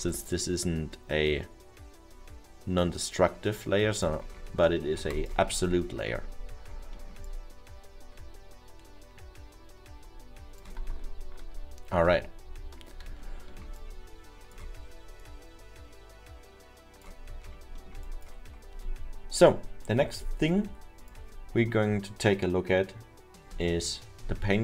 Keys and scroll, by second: 12.8 ctrl+z, 23.8 Delete.